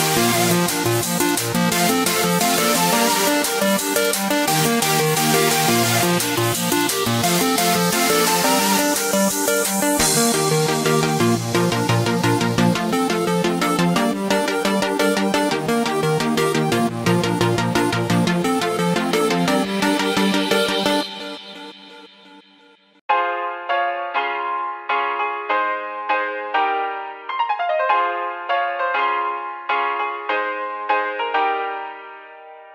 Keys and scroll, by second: 9.8 v, 12.3-13.2 typing, 14.7 z, 15.6 a.